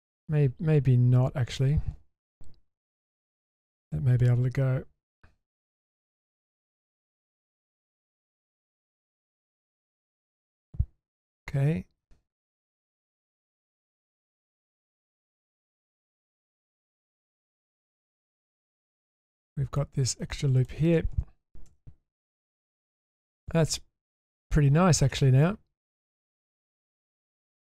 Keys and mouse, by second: 2.8 ctrl+x, 3.6 middle click, 4.1 Tab, 4.5 middle click, 6.0 Tab, 6.4 middle click, 7.3 shift+middle drag, 7.8 middle click, 8.8-9.1 middle drag, 10.1-10.4 shift+middle drag, 10.6-12.8 middle drag, 13.2-13.6 shift+middle drag, 14.5-15.0 shift+middle drag, 15.2 middle click, 18.6 middle click, 19.0-19.8 middle drag, 20.6 alt+click, 21.7 ctrl+x, 22.6 shift+middle drag, 23.1-24.4 middle drag, 25.1 middle click, 26.4 shift+middle drag, 27.0-27.5 shift+middle drag.